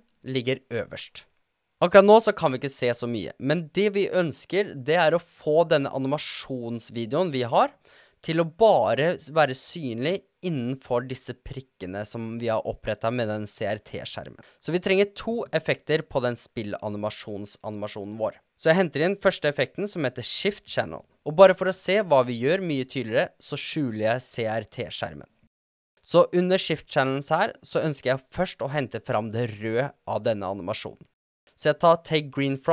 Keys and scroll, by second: 20.2-21.2 typing.